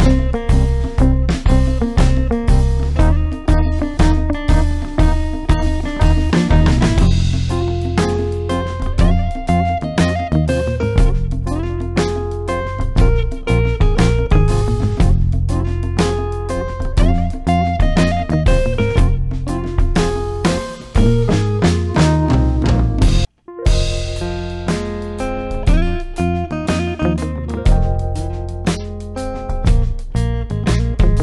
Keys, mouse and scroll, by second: 0.6 click, 5.2 click, 8.9-9.7 typing, 9.2 click, 13.1 ctrl+Num_Lock, 13.1 ctrl+click, 13.4 ctrl+d, 20.3 ctrl+d, 21.2 ctrl+click, 21.5-22.3 typing, 23.5-24.2 typing, 26.9 click, 28.0-28.7 typing.